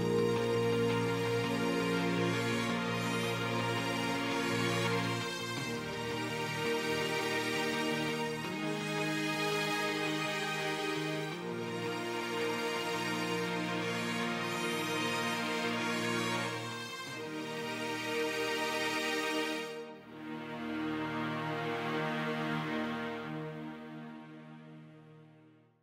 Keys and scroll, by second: 1.3 ctrl+Return.